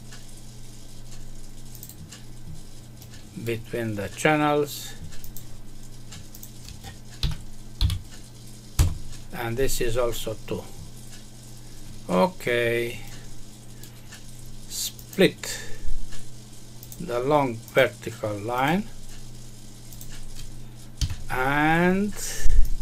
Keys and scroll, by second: 8.7 Return, 20.9 Escape.